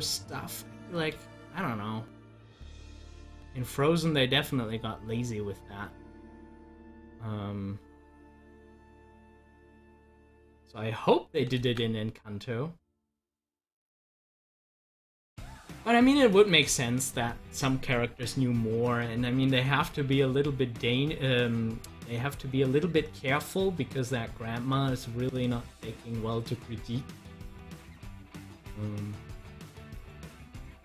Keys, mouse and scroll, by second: 1.2 ctrl+z, 18.9-30.8 drag.